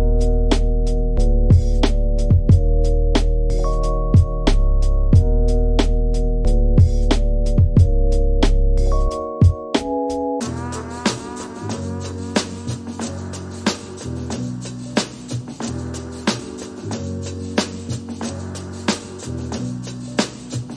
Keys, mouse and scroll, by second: 1.4 click, 1.6 click, 2.9-4.5 drag, 4.9 middle click, 5.8 g, 7.4-8.5 middle drag, 8.5 click, 8.8 shift+middle click, 9.2-10.4 scroll up 3, 10.4-11.9 drag, 15.5 middle click, 16.3 Tab, 16.4 scroll down 5, 16.6 middle click, 16.9 Tab, 17.0-18.7 scroll up 5, 19.2 ctrl+a, 19.5 middle click, 20.2 click.